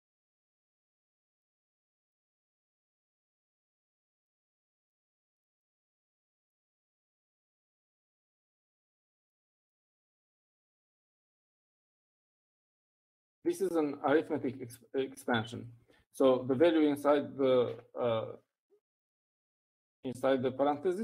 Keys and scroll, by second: 1.1-5.0 typing, 11.1-14.6 typing, 17.5 Left.